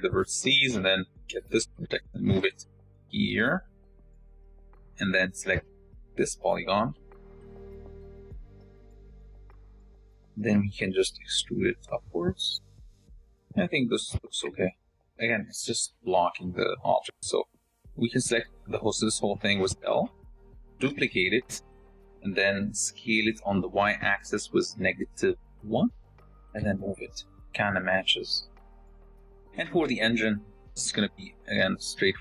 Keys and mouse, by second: 2.4 g, 6.3 click, 8.1 z, 9.1-11.3 drag, 12.1 e, 13.5-15.3 drag, 15.4 a, 19.1 l, 19.4 click, 20.7 shift+d, 22.0 click, 23.5 s, 25.5 g, 26.4-28.2 drag, 28.3 click, 29.2 shift+click, 32.0 click.